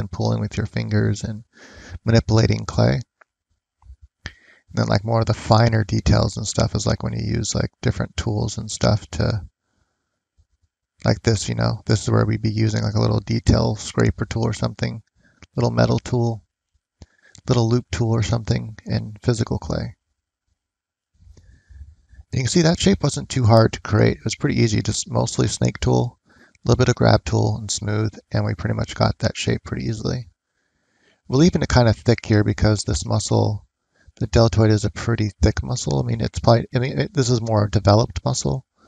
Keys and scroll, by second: 10.3 ctrl+z.